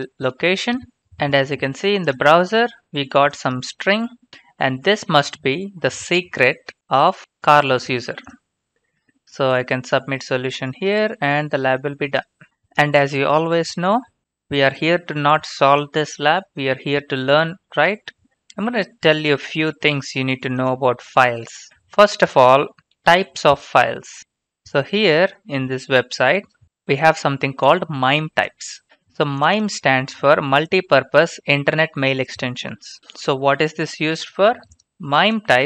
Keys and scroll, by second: 4.8 ctrl+c, 10.8 ctrl+v.